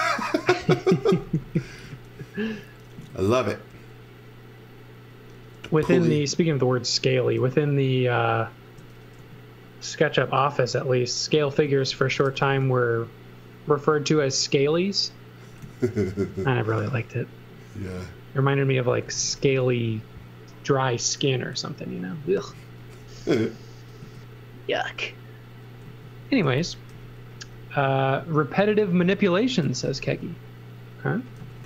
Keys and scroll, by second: 0.7 space, 1.8 s, 2.8 s, 5.8 m, 9.2 s, 11.4-12.7 typing, 15.6 z, 16.7 s, 18.8-19.8 typing, 23.5 s, 25.8 z, 26.3 x, 26.9 b, 29.4-30.4 typing, 31.4 z.